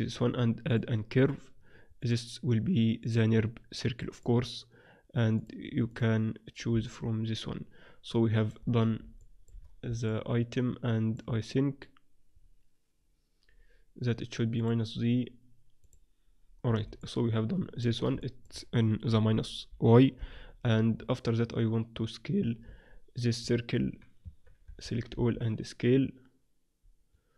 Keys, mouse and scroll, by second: 0.6 right click, 5.4-6.8 drag, 6.8-7.8 middle drag, 8.8-11.1 middle drag, 14.6-17.3 drag, 17.3 middle click, 19.0 KP_1, 20.1 KP_3, 20.6-22.2 middle drag, 23.1 click, 23.7 right click, 24.2 Tab, 24.2 click, 24.6 a, 24.8 a, 25.2 s.